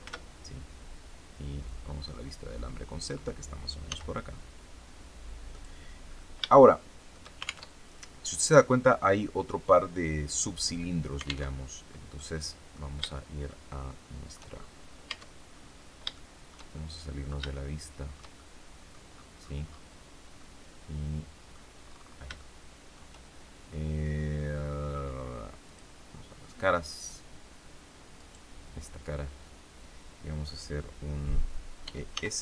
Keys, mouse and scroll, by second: 0.0 shift+z, 1.6-3.2 drag, 3.8 s, 5.4 click, 6.4 shift+middle click, 7.6 alt+shift+Tab, 11.4 alt+Tab, 12.1 middle click, 13.0 shift+middle click, 13.3 shift+scroll up 1, 13.7 shift+middle click, 14.4-14.8 shift+scroll up 1, 15.0 Tab, 15.4-15.9 scroll up 1, 15.9 scroll down 1, 16.1 shift+middle click, 16.7 shift+middle click, 17.5 shift+middle click, 18.6 middle click, 19.0-19.9 scroll down 2, 20.3-21.6 middle drag, 21.7-22.2 scroll up 3, 22.3 shift+middle click, 25.6 click, 28.1 right click, 31.8 e, 32.0 s.